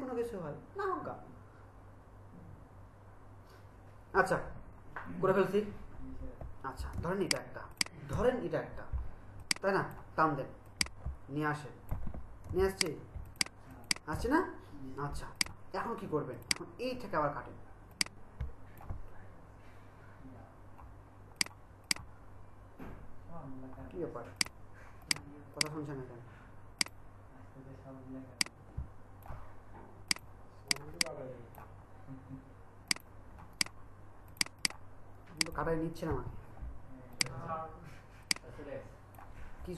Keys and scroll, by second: 6.9 ctrl+alt+space, 12.4 ctrl+alt+shift+space, 36.2 BackSpace.